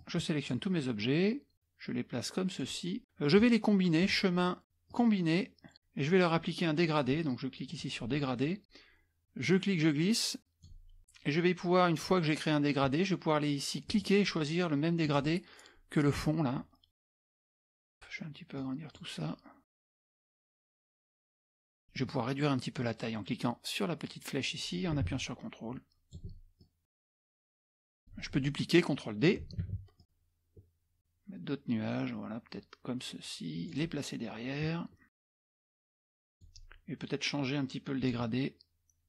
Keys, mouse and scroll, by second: 0.0 click, 1.0-3.0 drag, 4.0 click, 4.9 click, 7.7 click, 9.5-11.0 drag, 11.0-13.3 middle drag, 13.9 click, 15.1 click, 17.8 click, 18.6 click, 19.7 click, 20.2 click, 20.9 click, 21.3 z, 21.4 middle click, 21.6 click, 21.7 middle click, 21.7 scroll up 1, 24.1-26.2 drag, 26.6-28.4 drag, 29.7 ctrl+d, 30.0-34.1 drag, 35.3 click, 35.9 click, 36.2 click, 38.0 click.